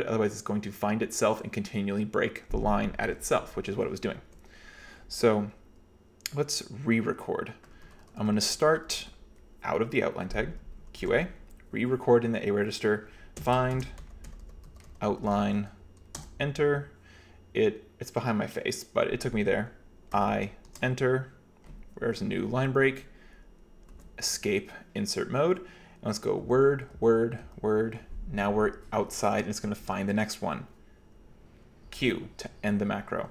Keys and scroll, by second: 4.0 h, 4.3 h, 7.7-8.9 typing, 10.7-11.6 typing, 13.4-15.8 typing, 16.3 Return, 20.2 i, 20.7 Return, 24.0 Escape, 26.4 w, 27.0 w, 27.4 w, 31.9 q.